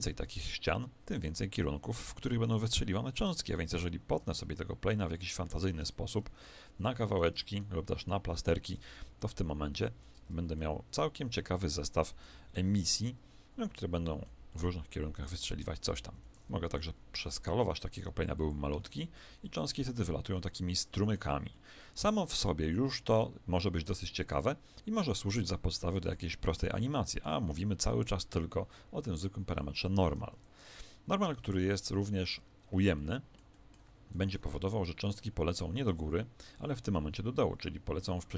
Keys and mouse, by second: 2.1 Escape, 2.7-4.9 middle drag, 3.3 Tab, 4.3 ctrl+r, 9.2 click, 9.2-10.5 right drag, 10.1 Tab, 11.7 middle click, 12.5 alt+a, 13.0-16.4 middle drag, 16.1 Escape, 16.7 s, 18.8 alt+a, 20.3-23.4 middle drag, 30.3 Escape, 31.4 ctrl+z, 31.6 ctrl+z, 32.9 ctrl+z, 32.9-37.1 middle drag, 34.3 KP_1.